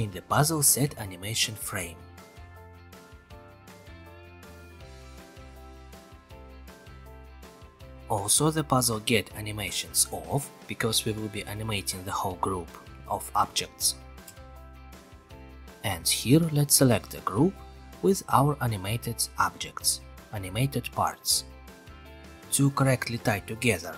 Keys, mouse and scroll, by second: 3.6-4.7 drag, 6.2-7.2 drag, 10.1-11.2 drag, 13.8-15.4 drag, 17.7 click, 19.2 click, 20.2-21.2 scroll.